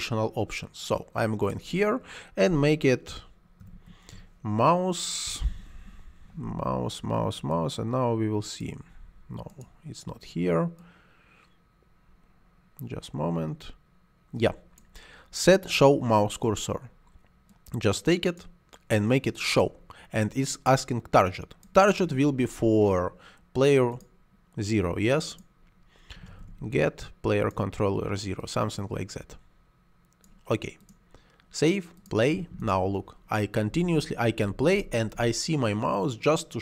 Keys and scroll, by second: 3.2-5.4 typing, 26.0 g, 26.3 t, 33.6 space.